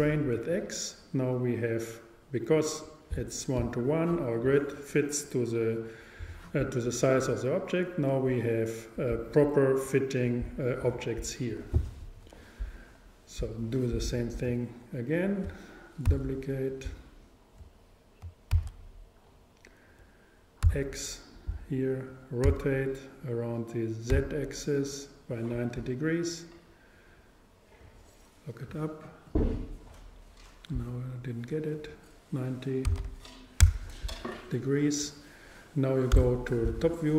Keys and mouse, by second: 3.3-5.3 drag, 15.2-17.0 super+right drag, 16.1 super+d, 18.6 shift+d, 21.6-23.7 drag, 22.5 r, 31.8-33.7 drag, 36.2 KP_7.